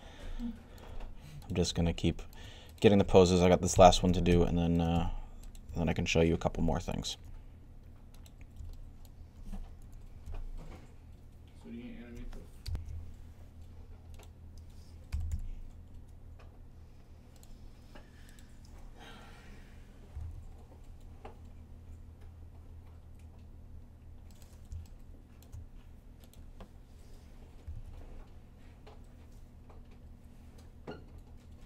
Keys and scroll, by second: 3.9-4.8 typing, 9.4-10.2 typing, 14.7-15.6 typing, 20.0 g, 22.3-23.0 typing, 27.5 typing.